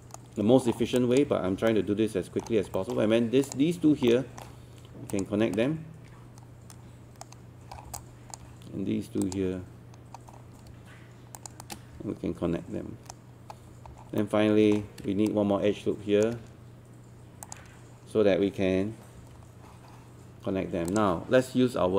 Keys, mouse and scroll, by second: 0.7 scroll down 1, 1.0 alt+click, 1.4 scroll up 1, 1.7 alt+middle click, 2.8 alt+middle click, 3.5 click, 4.1 alt+middle click, 5.1 shift+click, 5.6-7.4 shift+right drag, 7.8 scroll down 1, 8.0 alt+click, 9.2 click, 10.2 scroll up 1, 11.4 shift+click, 11.6-13.4 shift+right drag, 13.5-14.2 scroll up 2, 14.2 middle click, 15.3 shift+right click, 17.5 ctrl+click, 19.2 1, 20.9-21.9 drag.